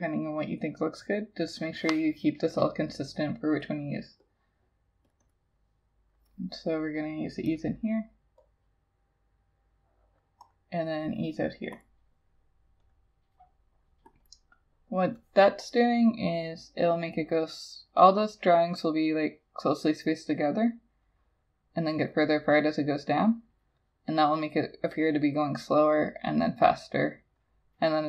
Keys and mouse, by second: 5.3 double click, 14.3 double click.